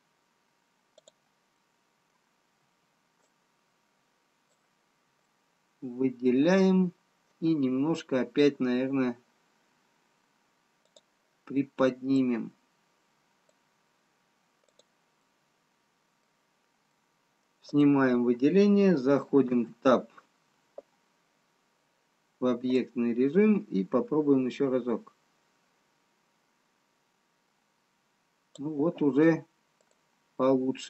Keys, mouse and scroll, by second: 3.0 click, 3.0 b, 5.4 middle click, 7.7-8.7 scroll down 1, 11.4 click, 12.1 click, 17.1 click, 17.1 middle click, 18.6 click, 20.7 Tab, 23.2 click, 30.4 click, 30.4 middle click.